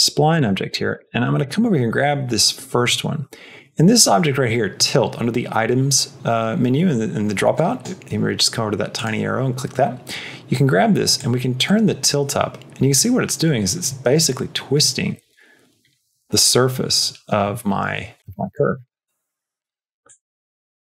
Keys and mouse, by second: 0.2 click, 0.5 shift+middle click, 7.4 click, 8.8 click, 11.1-18.2 drag, 18.5 click, 19.9-20.8 drag.